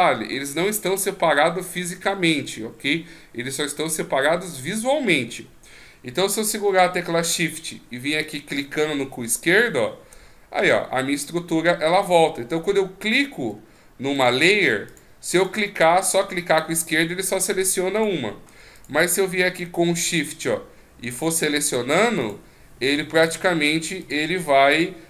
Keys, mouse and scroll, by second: 8.2 shift+click, 9.5 shift+click, 14.2 click, 14.9 click, 15.4 click, 16.1 click, 16.9 click, 17.9 click, 18.8 click, 20.1 shift+click, 21.2 shift+click, 22.2 shift+click, 23.2 shift+click, 24.0 shift+click, 24.7 shift+click.